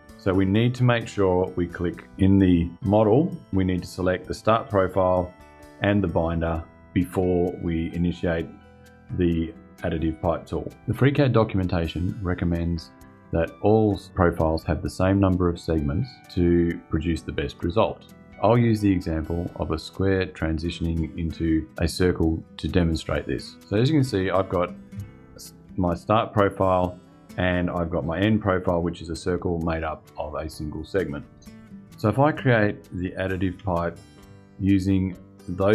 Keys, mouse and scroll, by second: 0.8 click, 5.6 ctrl+click, 7.7 click, 32.6 click, 33.6 ctrl+click, 35.1 click.